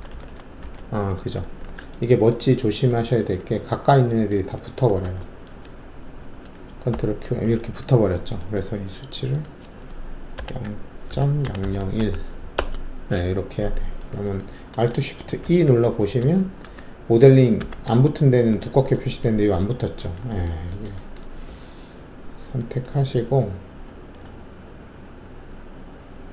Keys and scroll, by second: 1.6 alt+w, 5.0 alt+1, 6.9 ctrl+q, 10.3-11.9 typing, 12.5 Return, 15.4 alt+shift+e, 15.8 alt+shift+e, 16.2 alt+shift+e, 16.6 alt+shift+e, 21.4 alt+3.